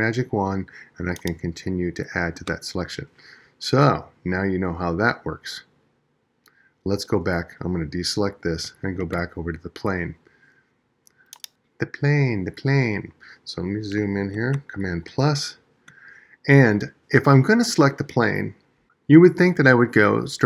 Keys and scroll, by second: 8.4 super+d.